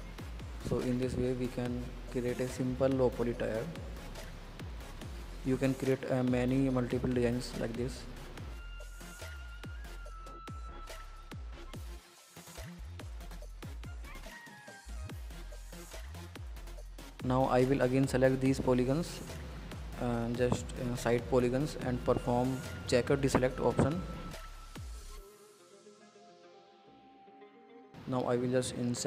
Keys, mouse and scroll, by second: 1.0 middle drag, 1.1-1.4 scroll up 4, 1.4-2.2 middle drag, 2.2 scroll down 1, 2.3-2.9 middle drag, 2.9-4.4 drag, 6.6-7.3 middle drag, 7.3 scroll down 4, 7.4-7.9 middle drag, 7.9 scroll up 2, 8.0-9.1 middle drag, 9.1 scroll up 2, 9.3 middle drag, 9.6 scroll down 5, 9.9-11.3 middle drag, 11.3-12.8 drag, 13.4 scroll up 2, 13.5 middle click, 14.0 Tab, 14.1 click, 14.4 scroll down 3, 14.6 click, 14.9 scroll up 3, 15.1 middle click, 15.6 scroll down 1, 15.7 middle click, 16.0 scroll up 2, 16.6 click, 16.7-18.3 middle drag, 19.1 alt+click, 21.0-22.0 drag, 22.0-23.5 middle drag, 25.6 scroll up 2, 25.8-28.0 middle drag.